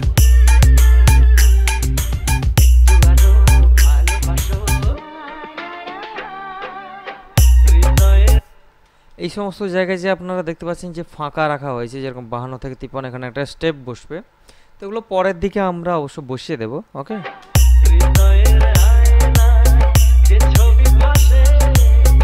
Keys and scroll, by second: 8.5 space, 17.3 space.